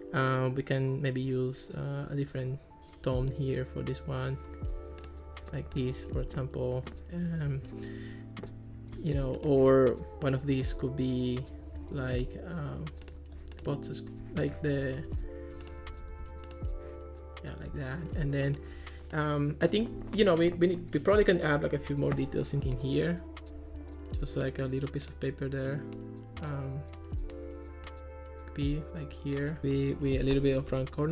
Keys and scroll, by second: 15.1 super+z, 16.0 super+z, 30.6 2, 30.7 Return.